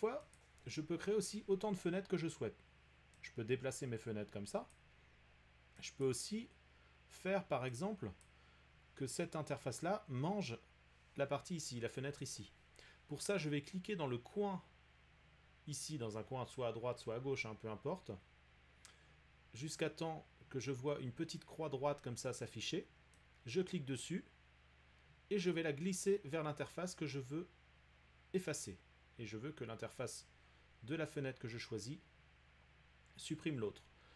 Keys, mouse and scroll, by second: 0.4 click, 4.7 click, 6.0 click, 8.2 click, 12.5-13.3 drag, 23.1 click.